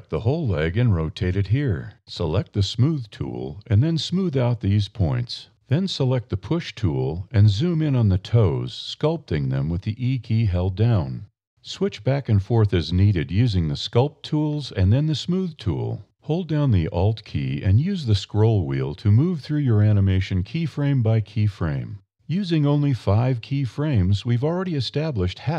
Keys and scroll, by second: 0.6 a, 2.1 e, 3.2 e, 5.2 d, 5.4 e, 6.9 e, 12.3 e, 13.6 e.